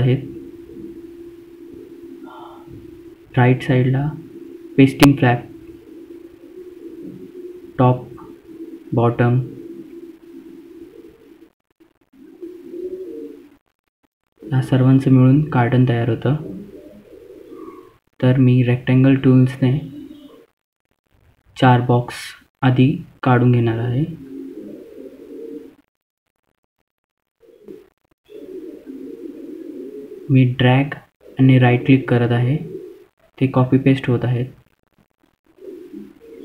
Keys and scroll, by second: 21.7 F2.